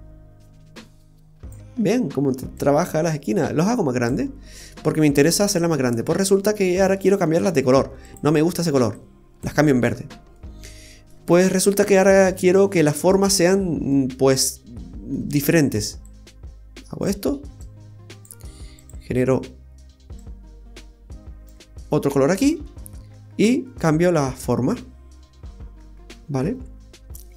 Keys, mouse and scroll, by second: 2.5 click, 4.5-5.7 scroll down 2, 4.7 middle click, 6.3-6.7 scroll down 3, 6.6 middle click, 8.0 click, 9.9-10.3 scroll up 1, 10.3 middle click, 11.1 scroll up 1, 11.5-12.0 scroll down 1, 12.0 middle click, 12.0-12.4 scroll down 1, 13.1 scroll down 2, 13.4 middle click, 14.2-14.7 scroll up 6, 14.7 middle click, 16.0 click, 17.6 click, 20.0 click, 20.2 click, 21.9-22.4 scroll up 1, 22.4 scroll down 1, 23.1 middle click, 23.1 scroll up 1, 23.6 scroll up 3, 23.6 middle click.